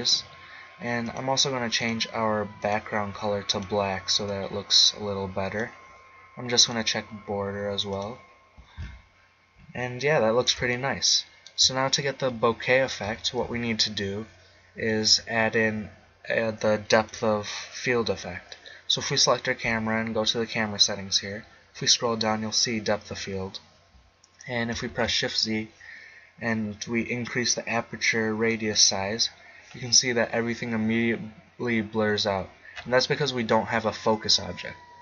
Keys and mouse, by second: 1.0-5.3 drag, 6.6-9.8 drag, 10.7 middle click, 13.0 z, 13.4 z, 15.0-16.5 right drag, 16.9-18.8 drag, 20.9-23.8 middle drag, 24.9 shift+z, 28.7-30.6 drag.